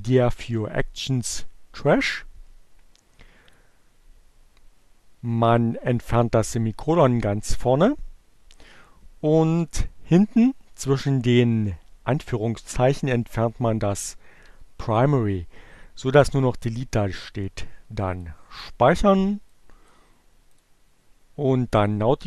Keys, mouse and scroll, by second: 3.5 click, 4.1 Delete, 11.1-13.8 drag, 13.9 Delete, 18.2 click, 19.6 click, 20.6 click.